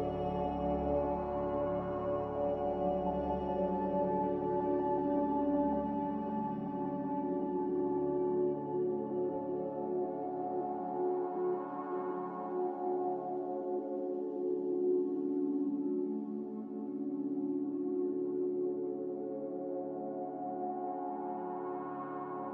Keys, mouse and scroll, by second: 2.7 click, 4.2 a, 12.1 click, 17.3 click.